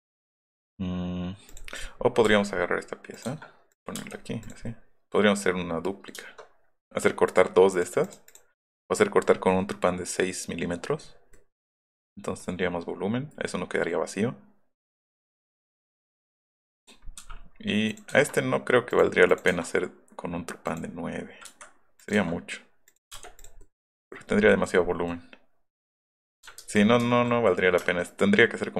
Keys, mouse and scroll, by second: 1.5 click, 1.8 scroll down 1, 2.3 ,, 3.1 click, 3.8 click, 4.0 space, 4.0 middle click, 4.2 middle click, 4.5 click, 6.9-8.1 middle drag, 7.3 click, 7.7 click, 8.1 click, 8.3 click, 9.3 scroll up 2, 9.4-11.3 middle drag, 11.7-12.4 middle drag, 13.3 middle click, 13.8-15.3 middle drag, 15.5 scroll up 2, 15.7 middle click, 16.3-17.5 middle drag, 17.2 m, 20.7 click, 21.4 Escape, 22.0 click, 23.2 space, 23.6 middle click, 24.2-25.1 scroll down 4, 26.6 ctrl+z, 27.0 ctrl+z, 27.5 middle click, 28.1 middle click.